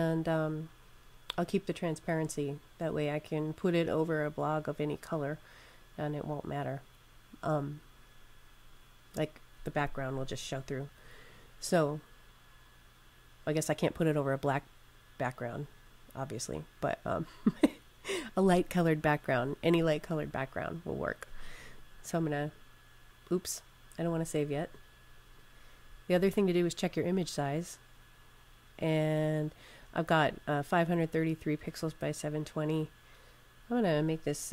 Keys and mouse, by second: 21.5 click, 25.2 click, 33.3 click.